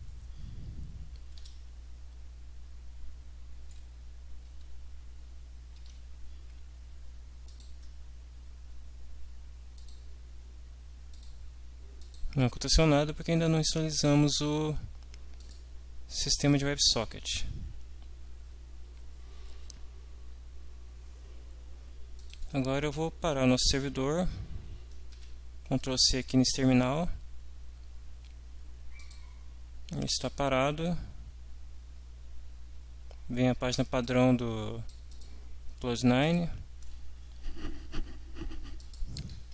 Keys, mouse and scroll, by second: 1.4 F5, 4.6 alt+Tab, 5.8 alt+Tab, 7.4 click, 9.8 click, 11.2 click, 12.0 click, 15.4 click, 16.6 click, 18.9 Up, 22.2 click, 25.1 ctrl+c, 29.0 click, 30.1 click, 34.0 click, 36.3 click, 38.8 click.